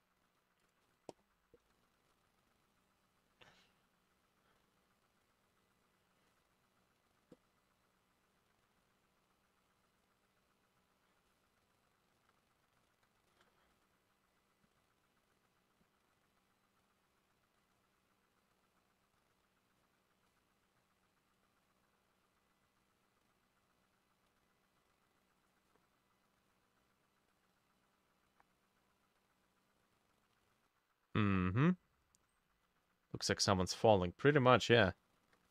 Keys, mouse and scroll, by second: 1.7-31.6 ctrl+drag, 1.7 b, 1.9 ctrl+middle click, 12.7 ctrl+middle click, 34.9-35.5 ctrl+drag, 34.9 ctrl+middle click.